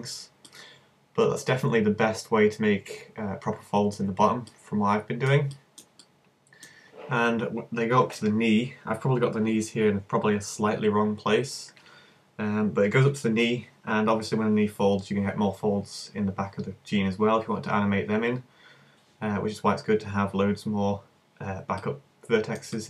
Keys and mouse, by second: 0.1 click, 2.5-4.6 middle drag, 8.0-21.3 middle drag.